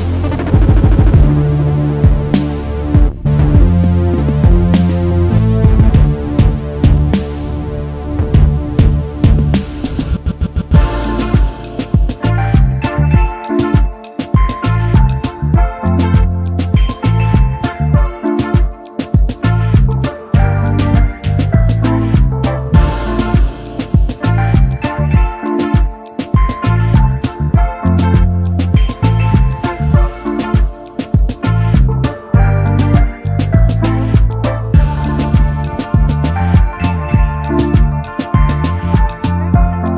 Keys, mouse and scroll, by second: 2.7 double click, 4.2 ctrl+x, 4.4 ctrl+f, 5.3 double click, 7.8-8.4 typing, 11.1-12.1 typing, 13.2 alt+scroll up 1, 14.3 shift+click, 15.6 right click, 16.8 double click, 19.6 alt+scroll up 1, 20.2 shift+click, 22.4 double click, 23.5 shift+click, 25.4 shift+click, 28.0 typing, 31.1 typing, 36.9 double click.